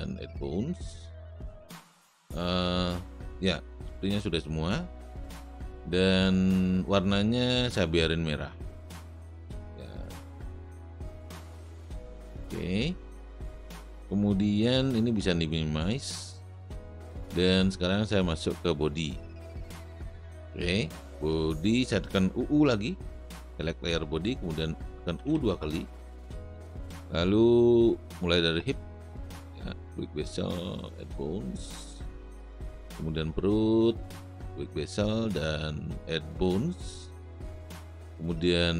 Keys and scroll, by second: 25.4 u.